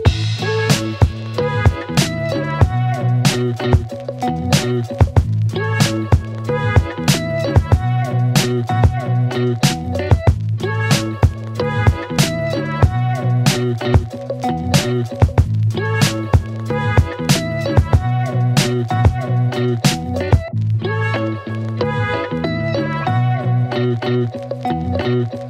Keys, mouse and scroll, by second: 1.3 \, 2.7 Return, 3.8 space, 5.3 click, 11.7 space, 14.0 space, 15.8 click, 17.6 space, 22.6 click, 25.0-25.4 click.